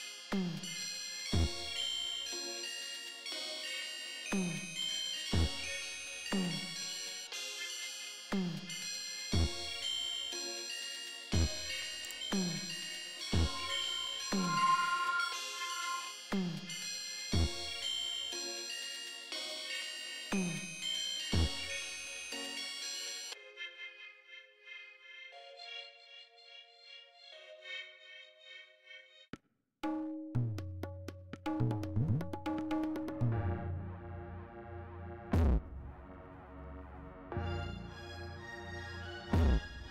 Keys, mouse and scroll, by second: 1.8 right click, 7.3 click, 9.4 click, 12.3-14.5 drag, 16.9 right click, 21.8 click, 23.6 click, 28.2-30.0 drag, 32.6 click, 33.3 right click, 36.1 click.